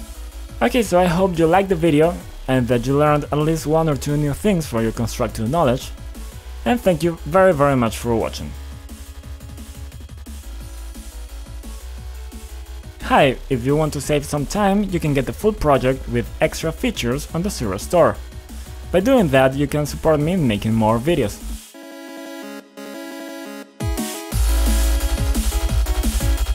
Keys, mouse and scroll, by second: 0.0-2.5 typing, 3.5 click, 4.5-5.6 typing, 6.6 click, 7.3-10.6 typing.